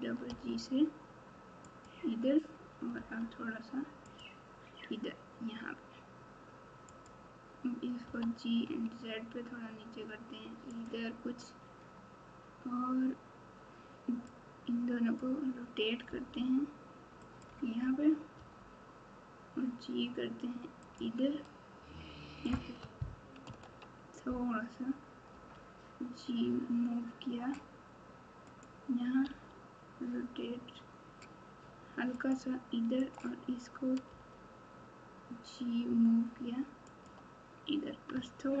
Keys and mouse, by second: 2.9 g, 7.0 click, 8.0 g, 14.6 click, 16.0 r, 18.3 g, 23.4 ctrl+z, 25.3 g, 29.2 r, 33.0 click, 34.0 g, 38.1 Tab.